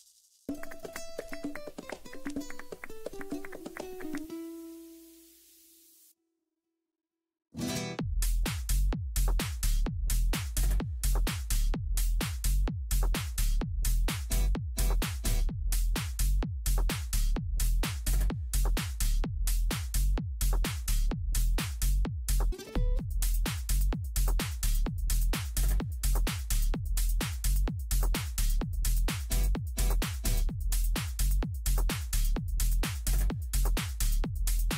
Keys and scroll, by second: 2.7 F12, 28.9 ctrl+x, 32.9 ctrl+v.